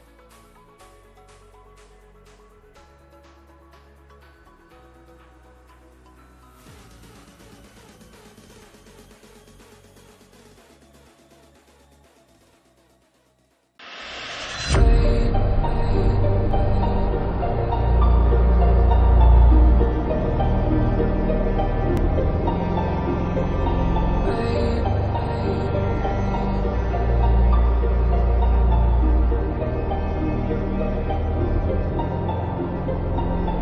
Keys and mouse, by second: 0.0-0.1 typing, 1.9 click, 7.8 click.